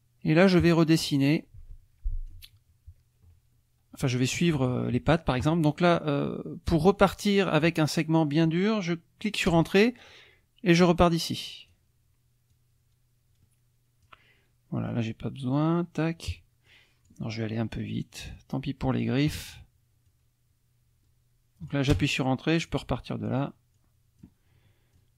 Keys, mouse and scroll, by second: 0.3-2.5 drag, 9.5 Return, 10.8-11.9 drag, 12.5-14.2 drag, 14.9 click, 16.7 click, 17.9-19.2 drag, 20.1-21.9 drag, 21.9 Return, 22.7 click, 23.7 click, 24.9-25.1 drag.